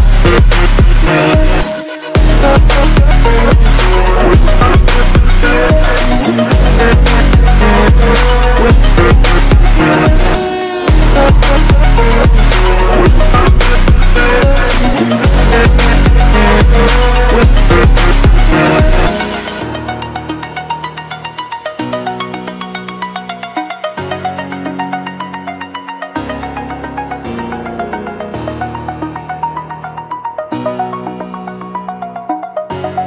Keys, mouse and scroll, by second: 2.9-3.4 scroll up 2, 3.7 ctrl+alt+scroll down 1, 5.0 click, 20.1 right click, 20.9 click, 29.0 click.